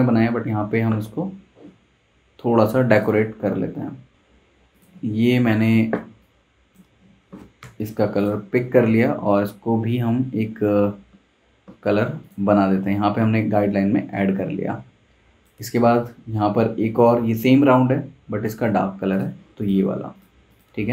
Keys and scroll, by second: 7.6 i, 8.8 v.